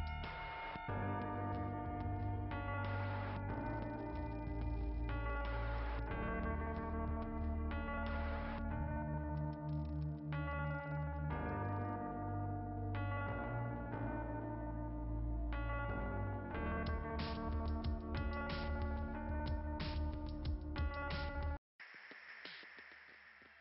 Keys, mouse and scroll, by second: 1.0 click, 1.6-2.7 scroll up 1, 2.7 click, 3.3 scroll up 2, 5.1 right click, 6.0 click, 7.1 right click, 8.9 click, 10.1 click, 11.3 click, 11.8 click, 12.7 click, 14.2-15.1 typing, 17.2 click, 19.1 click, 20.1 click, 20.9 click.